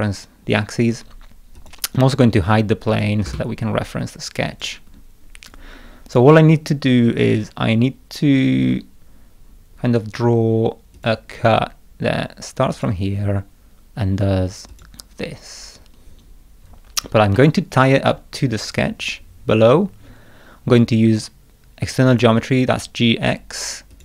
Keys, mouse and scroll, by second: 1.6 click, 2.9 click, 3.3 space, 4.5 click, 7.0-7.6 scroll down 4, 11.0 click, 12.7 click, 14.7 click, 16.3 scroll down 1, 16.7 scroll up 1, 17.3 scroll up 1, 17.4-18.8 middle drag, 22.1 click, 23.9 click.